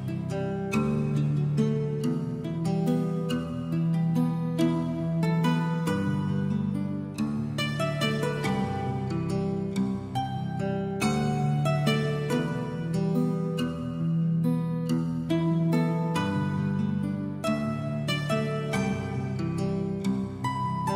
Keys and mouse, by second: 0.0 middle click, 0.3 alt+middle click, 0.6 g, 0.7 z, 1.6 right click, 1.9 Tab, 2.3 a, 2.8 s, 3.3 right click, 3.5 shift+middle click, 4.7 Tab, 5.5 g, 5.6 z, 6.3 click, 6.6 shift+middle click, 7.3 s, 8.0 right click, 9.0 shift+c, 9.2 shift+click, 9.9 click, 10.5 s, 11.0 click, 12.7 middle click, 13.2 s, 14.8 click, 15.2 shift+middle click, 15.6 shift+middle click, 15.9 shift+middle click, 16.2 shift+middle click, 16.6 shift+middle click, 17.5 alt+middle click, 17.9 shift+middle click, 18.1 shift+middle click, 18.4 shift+middle click, 18.8 shift+middle click, 19.0 alt+middle click, 19.2 shift+middle click, 20.0 shift+middle click, 20.6 s.